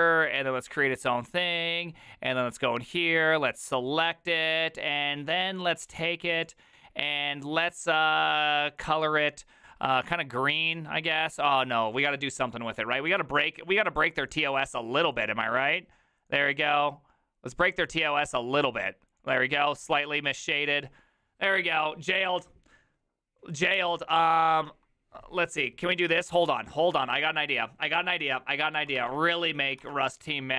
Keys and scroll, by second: 29.0 alt++, 29.8 ctrl+t.